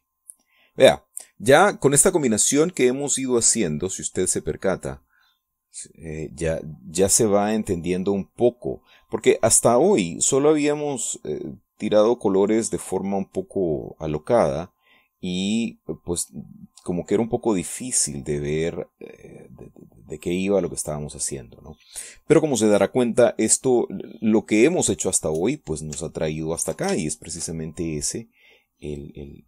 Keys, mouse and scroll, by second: 1.0-2.1 drag, 3.7-15.0 drag, 15.1-16.5 drag, 16.7-22.4 drag, 22.9 middle click, 23.4 click, 24.0 click, 24.6 click, 25.1 click, 25.6 click, 27.8 ctrl+click, 28.2 ctrl+shift+click, 29.1-29.4 shift+drag.